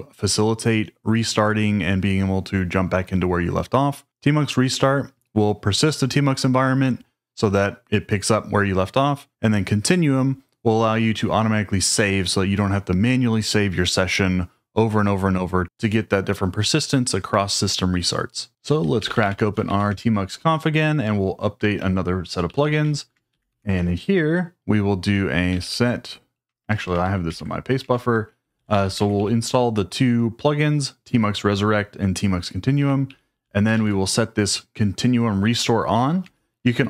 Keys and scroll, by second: 18.8-20.1 typing, 21.7-23.9 typing, 25.2-26.9 typing, 27.2 super+v, 27.8 Escape, 28.1-29.6 typing, 32.7 Escape, 33.0 j, 33.7 shift+v, 36.2 Escape.